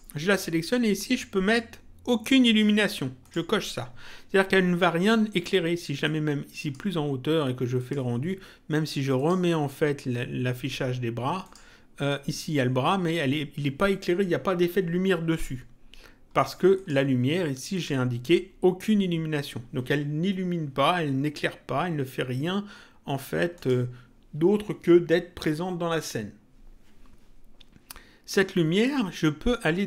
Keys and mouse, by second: 3.1 click, 6.0 click, 7.7 click, 9.1 click, 11.4 click, 16.3 click, 23.5 click.